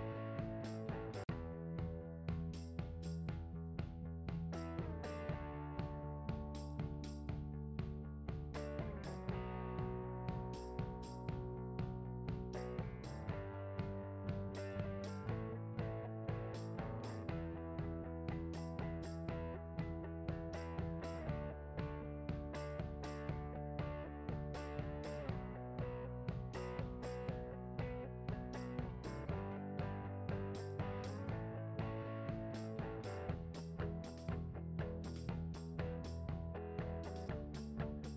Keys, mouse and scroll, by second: 0.0-3.3 typing, 0.0-0.4 scroll up 1, 0.8 scroll down 1, 1.0 shift+click, 1.4 right click, 1.6 click, 2.4 click, 4.3 click, 4.4 scroll down 1, 4.6 scroll up 1, 4.8 scroll down 1, 4.8-5.3 scroll up 1, 5.3 alt+a, 5.6 `, 7.1 click, 7.4 g, 8.2 click, 8.3-9.0 scroll down 2, 8.6 `, 9.0 `, 9.4 KP_0, 9.9 click, 10.4 g, 11.7 KP_Decimal, 11.9 `, 12.4 scroll down 1, 12.5 g, 13.6 click, 13.7 s, 16.0 click, 17.0 `, 18.6 click, 18.8 `, 19.0-19.4 scroll down 4, 19.2 `, 19.4 scroll up 2, 19.6 `, 20.1-21.4 drag, 21.5-22.0 scroll up 1, 22.1 click, 22.4 scroll up 1, 23.6 shift+click, 24.0 click, 24.3 shift+click, 24.5 ctrl+j, 24.7 alt+a, 24.8 click, 25.4 alt+a, 25.5 scroll down 1, 25.6 KP_0, 25.8 scroll up 1, 26.4 click, 26.5 s, 28.0 click, 28.2 ctrl+a, 28.6 click, 28.7 scroll down 1, 30.0 click, 30.5 KP_0, 30.6 scroll up 1, 30.8 alt+a, 31.2-31.6 scroll up 1, 31.8 click, 32.0 r, 33.3 alt+a, 34.4-35.6 scroll down 1.